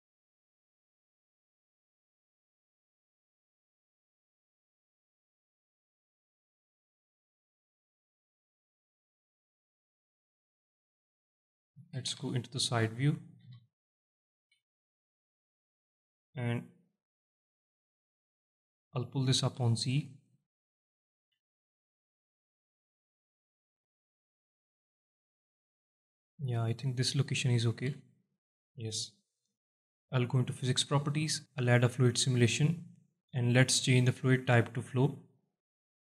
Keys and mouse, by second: 0.3 s, 1.2 click, 1.5 middle click, 2.1 alt+shift+middle click, 2.7 s, 3.5 click, 4.1 alt+shift+middle drag, 4.9 g, 6.4 shift+click, 7.2 middle drag, 8.1 s, 9.2 click, 9.8 g, 10.7 shift+click, 12.2 KP_3, 13.5 KP_1, 14.4 z, 17.2 click, 17.7 alt+shift+middle drag, 18.1 drag, 19.5 click, 20.1 shift+drag, 20.1 shift+right drag, 21.4 shift+middle drag, 22.4-23.4 drag, 23.9 alt+shift+middle drag, 25.2 click, 28.0 z, 28.4-29.1 alt+middle drag, 29.6 middle drag, 31.1 click, 33.2-35.0 drag, 35.9-36.0 drag.